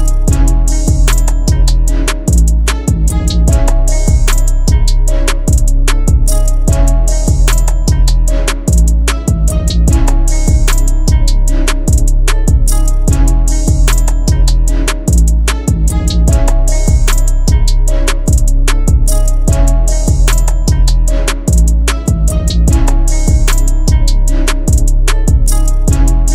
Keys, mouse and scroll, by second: 16.8-17.5 scroll down 1, 18.3 ctrl+click.